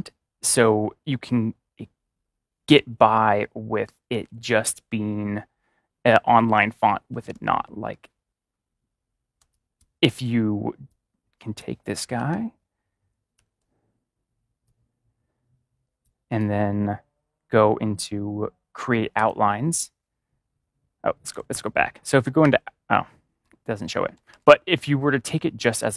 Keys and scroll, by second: 7.0 ctrl+=, 9.3 space, 12.1 ctrl+-, 13.3 ctrl+-, 21.2 ctrl+z, 22.4 ctrl+y, 24.0 ctrl+z, 24.2 ctrl+y.